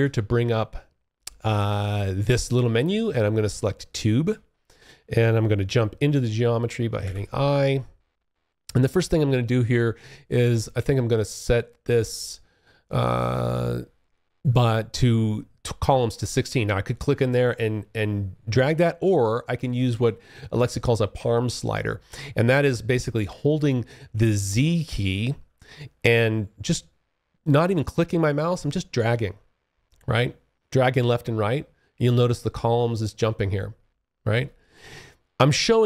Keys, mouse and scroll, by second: 3.3 alt+click, 6.1 i, 24.6-33.4 z, 33.5 z.